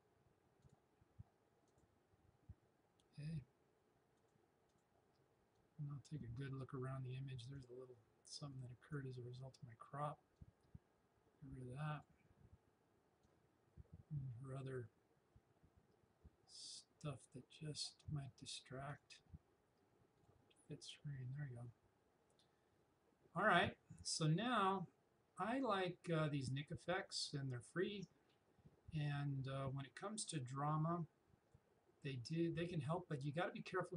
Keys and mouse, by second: 0.6 click, 4.2-18.9 drag, 25.6-33.9 drag.